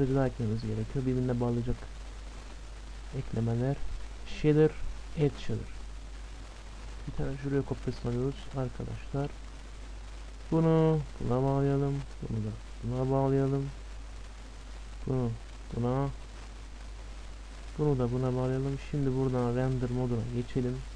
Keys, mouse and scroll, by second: 2.3 shift+a, 7.0 shift+d, 8.5-10.6 middle drag, 10.2-13.8 drag, 13.2-14.9 middle drag, 14.9-16.9 drag, 16.0-17.9 middle drag, 17.9-18.9 drag, 18.2-20.0 middle drag, 19.2-20.9 drag.